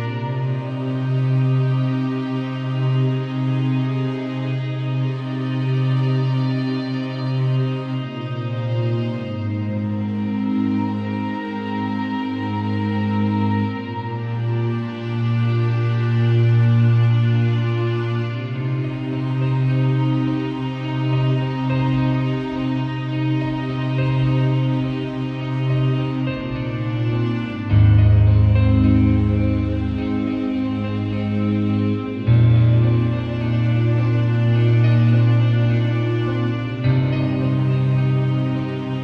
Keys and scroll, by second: 11.9 super+l, 14.3 Return, 18.7 Return, 25.0 alt+shift+Return, 25.5 shift+Return, 27.4 z, 28.5 v, 30.1 super+t, 32.2 Return, 32.9 super+Return, 33.0 super+l.